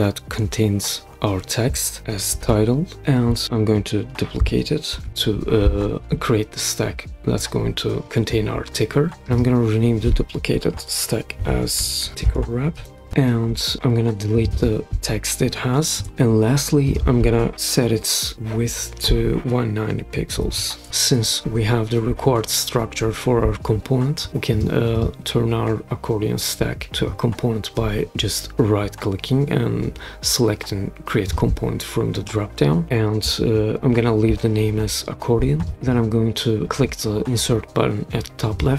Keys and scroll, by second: 1.8-2.8 typing, 4.9 super+d, 10.8-13.5 typing, 15.9 BackSpace, 20.0-21.0 typing.